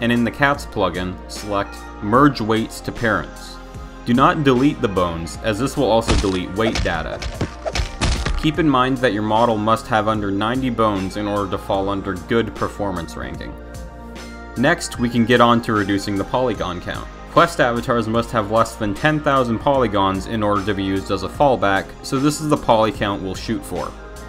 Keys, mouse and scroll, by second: 0.2 click, 0.4 right click, 0.6 c, 2.5-3.3 drag, 4.0 ctrl+z, 4.0 x, 5.8 click, 8.6 ctrl+z, 8.8 click, 9.0 middle click, 9.2 c, 9.4 middle click, 9.6 click, 9.6 c, 9.8 middle click, 10.0 middle click, 10.1 c, 10.2 right click, 10.2 middle click, 10.4 c, 10.6 middle click, 10.9 shift+click, 11.0 middle click, 11.1 middle click, 12.5 click, 12.9 middle click, 13.2 Tab, 13.4 middle click, 13.5 shift+middle click, 13.8 click, 13.9 middle click, 14.3 shift+middle drag, 15.1 click, 16.6 click, 17.9 click, 18.9-22.5 drag, 19.9 0, 20.1 0, 23.8 click.